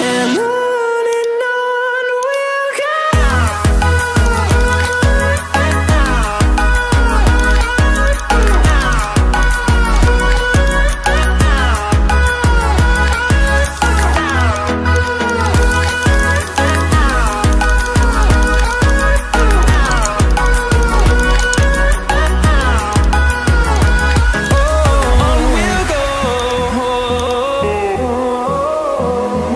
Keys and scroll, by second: 28.4 ctrl+d.